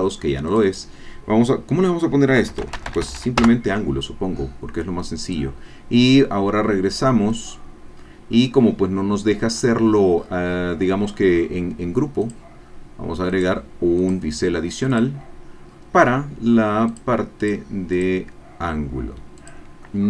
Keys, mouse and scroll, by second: 0.5-2.5 drag, 2.5-3.2 typing, 3.4 Return, 5.3 click, 7.3 click, 7.9-8.6 scroll down 2, 9.5-10.5 scroll up 4, 12.2 click, 13.3 click, 14.0 click, 14.9 click, 15.7-16.3 scroll down 2, 16.9 click, 17.4 click, 17.9 click, 19.5 click.